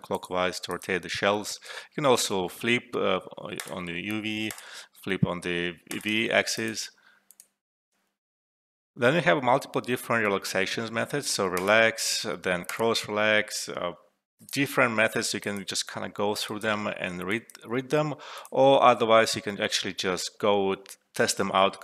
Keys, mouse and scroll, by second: 3.5 click, 7.6 click, 11.5 click, 19.3 ctrl+z.